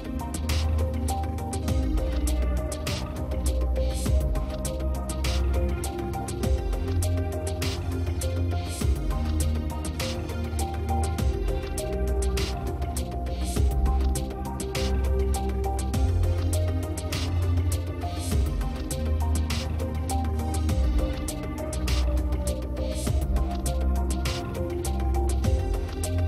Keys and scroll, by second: 6.5 space, 7.0 space, 19.5 space, 20.7 space.